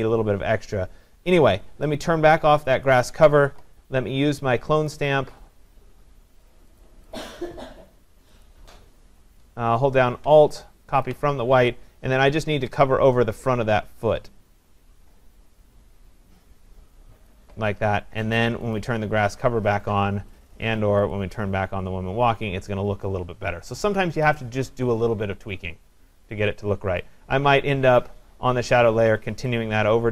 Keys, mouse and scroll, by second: 2.9 click, 6.8 click, 7.2 click, 8.5 click, 11.1 alt+click, 12.2 alt+click, 17.3 click, 18.8 click, 21.1 click.